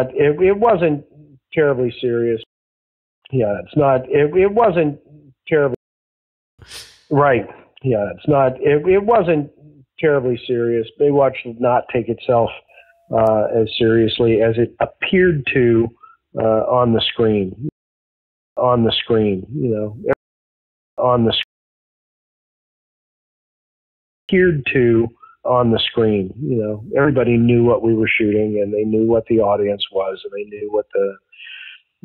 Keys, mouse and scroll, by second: 0.6-2.4 drag, 2.4 space, 3.0 ctrl+shift+Delete, 3.1 space, 4.0 click, 5.0 click, 5.7 space, 6.0 click, 6.4 click, 6.5 space, 12.5 click, 13.6 click, 14.8-16.1 drag, 16.4 click, 17.6 space, 18.1 click, 18.5 space, 18.8-20.0 drag, 20.7 ctrl+shift+Delete, 20.9 space, 21.4 space, 21.9 click, 22.6-23.7 drag, 24.1 click, 24.2 space, 26.0 click, 26.5 click, 27.4 click, 28.1 ctrl+s.